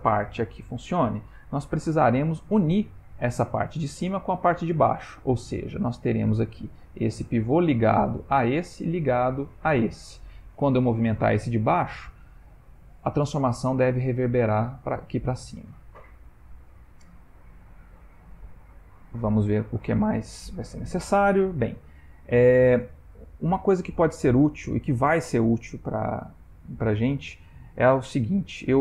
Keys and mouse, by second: 17.4 click, 21.6 ctrl+middle click, 22.2 ctrl+middle click, 26.1 click, 28.2 shift+middle click, 28.5 shift+middle click.